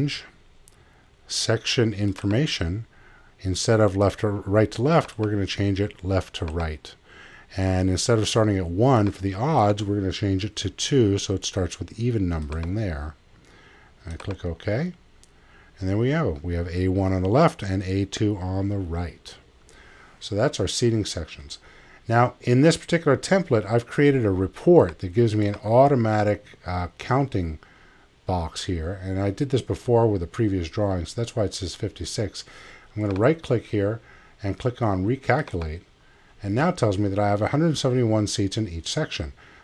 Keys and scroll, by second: 10.5 2.